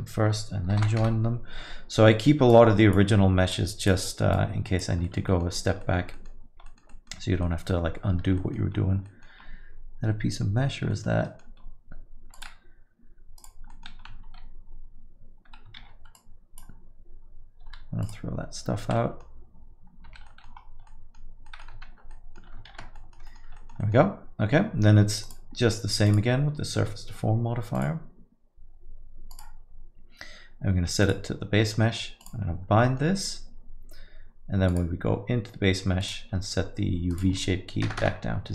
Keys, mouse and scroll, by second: 1.1 ctrl+j, 1.4 Return, 2.5 click, 3.5 click, 5.0 click, 5.0 middle click, 5.3 alt+middle click, 5.5 middle click, 5.8 alt+middle click, 6.1 middle click, 6.7 middle click, 6.8 alt+middle click, 6.9 alt+middle click, 7.4 alt+middle click, 7.9 scroll up 4, 8.4 alt+middle click, 8.7 scroll up 2, 9.0 middle click, 9.4 scroll up 1, 9.8 scroll down 2, 10.6 scroll down 6, 10.9 alt+middle click, 11.2 middle click, 11.6-12.1 scroll up 2, 12.3 click, 13.4 click, 13.7 middle click, 14.0-15.4 scroll up 1, 15.4 Tab, 15.8 shift+z, 16.1 click, 17.6 x, 20.7 middle click, 20.7 scroll down 5, 20.7 1, 20.9 middle click, 21.5 middle click, 22.2 Tab, 22.7 shift+z, 23.0 alt+middle click, 23.3 middle click, 23.6 alt+middle click, 23.8 middle click, 25.2 click, 26.1 click, 29.3 click, 32.2 click, 34.4 middle click, 34.7 click, 36.0 click, 37.3 click.